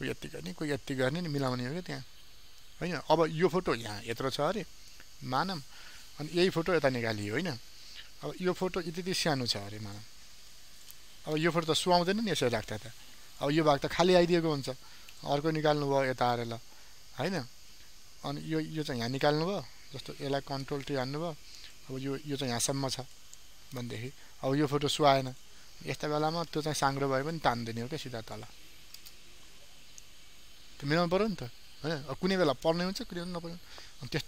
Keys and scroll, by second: 8.2 ctrl+t, 20.2 ctrl+t, 26.3 ctrl+t.